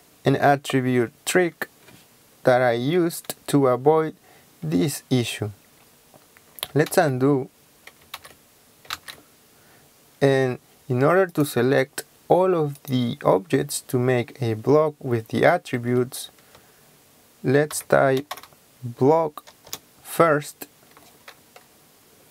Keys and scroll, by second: 6.9 ctrl+z, 8.2 ctrl+z, 15.8 Escape, 17.7-18.4 typing, 19.7 Return.